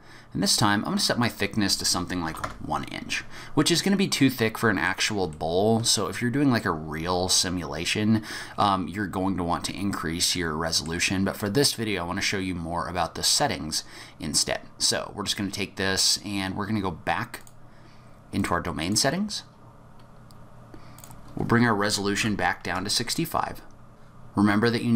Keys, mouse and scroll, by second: 1.2 click, 3.7-4.1 scroll up 3, 4.1 middle click, 5.3 shift+middle click, 6.4-7.1 scroll down 2, 7.1-8.3 scroll up 1, 10.3 middle click, 17.4 click, 18.3 click, 18.8 click, 20.9 click, 23.9 click.